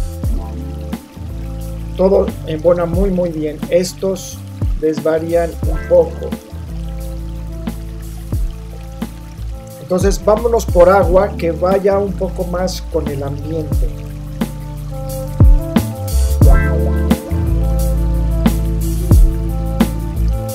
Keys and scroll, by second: 16.7 super+d, 18.2 super+d.